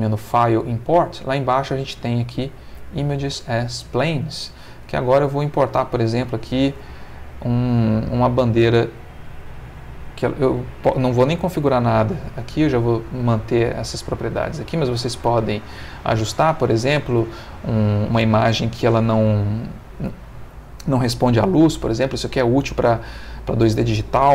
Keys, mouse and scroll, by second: 2.8 click, 5.0 click, 6.4 click, 14.1 middle click, 15.5 middle click.